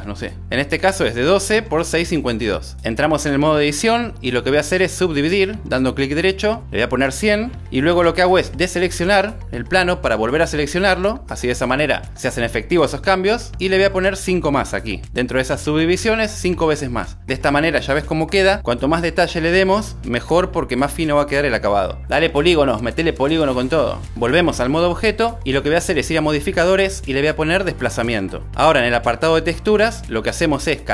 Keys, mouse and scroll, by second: 0.2 n, 1.3 click, 2.1 click, 23.6 Tab, 24.9-28.4 drag, 30.5 click.